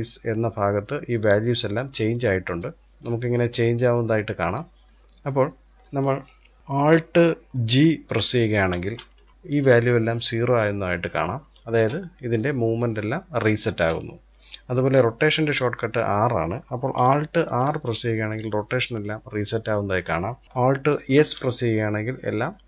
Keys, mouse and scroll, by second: 2.2 click, 3.4 click, 4.4-6.6 middle drag, 8.3 alt+g, 17.2 alt+r, 20.7 alt+s.